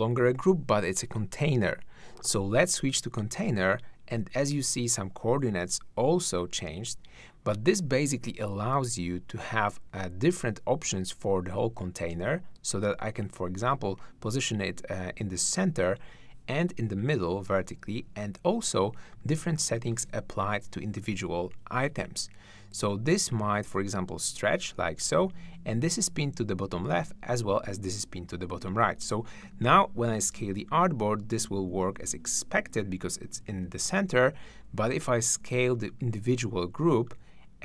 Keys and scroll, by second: 33.5 super+z.